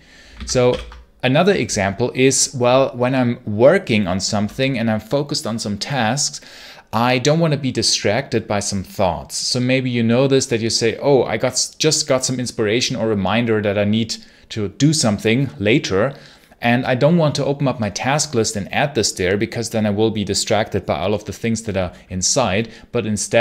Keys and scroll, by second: 0.2 ctrl+c, 0.5 ctrl+l.